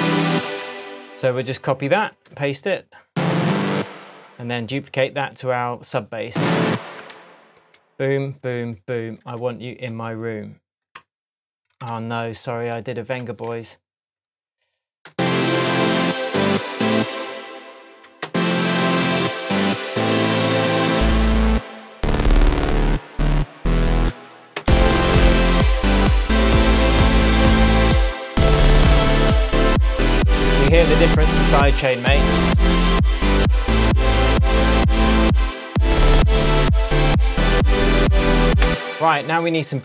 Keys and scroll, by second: 0.4 space, 3.8 BackSpace, 7.1 super+d, 7.6 shift+super+d, 7.7 shift+super+Tab, 8.5 shift+Tab, 12.0 alt+super+z, 12.9 super+z, 13.5 shift+super+z, 15.1 space, 15.7 shift+Tab, 16.9 space, 24.0 space, 34.2 super+s, 38.6 space.